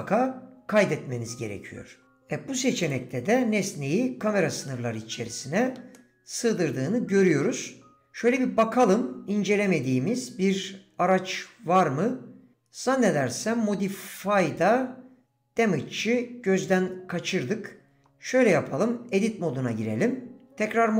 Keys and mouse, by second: 1.5-2.0 drag, 2.0 d, 4.7-5.8 middle drag, 5.9 middle drag, 6.2-6.6 drag, 19.0 Tab.